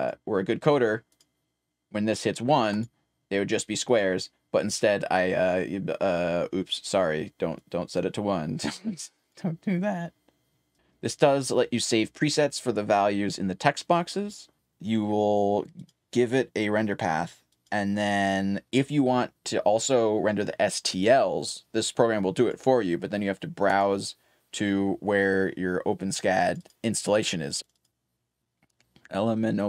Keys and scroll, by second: 0.0-2.5 typing, 5.6-8.6 typing, 10.7-11.6 typing, 12.8-16.8 typing, 21.3-24.4 typing.